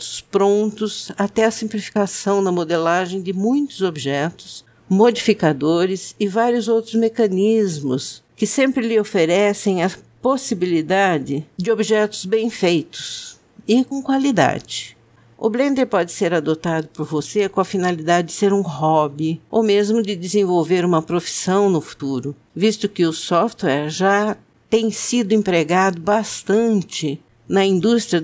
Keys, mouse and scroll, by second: 1.0 click, 4.5 shift+middle click, 5.2 ctrl+middle click, 5.4 shift+middle click, 7.6 click, 11.6 click, 12.8 middle click, 14.0 click, 15.8 click, 17.3 click, 21.9 click, 22.6 click, 25.1 click, 26.0 middle click, 26.5 middle click, 26.8 middle click, 27.4 click.